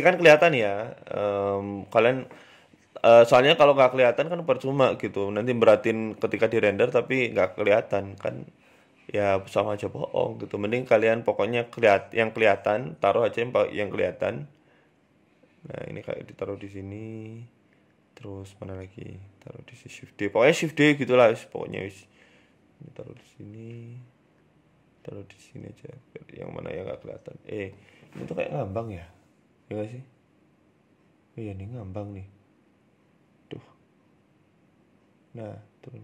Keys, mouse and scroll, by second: 0.1 shift+d, 1.1 r, 2.3 right click, 2.5-3.1 scroll down 4, 3.9-4.3 scroll down 1, 3.9 g, 7.1 s, 7.1 shift+d, 8.0 e, 8.8 r, 10.6 right click, 11.4 right click, 12.1 shift+d, 13.2 r, 18.3 right click, 18.9 shift+d, 20.5-21.1 scroll up 2, 21.1 shift+d, 22.4 shift+d, 24.1 right click, 24.3 shift+d, 25.8 shift+d, 30.7 right click, 30.7 r, 31.5 shift+right click, 32.7 shift+right click, 33.4 shift+right click, 33.4 ctrl+z, 33.8-34.2 scroll up 5, 34.1 shift+middle click, 35.0 shift+right click, 35.6 g.